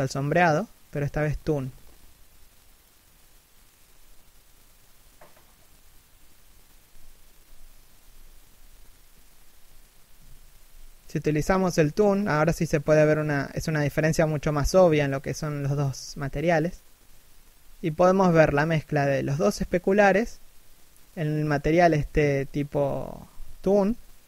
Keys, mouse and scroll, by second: 13.0 r, 13.3 right click, 13.4 r, 18.7 a, 19.0-19.6 scroll down 1, 20.3 scroll up 1, 21.5-22.0 scroll up 1.